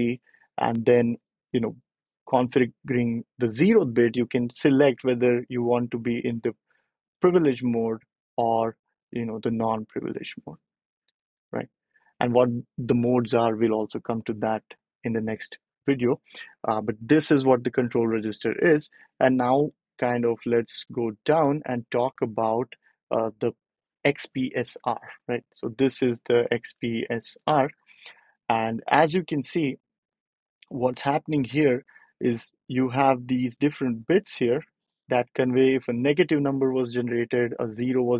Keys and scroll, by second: 19.1 BackSpace, 24.5 ctrl+alt+super+p.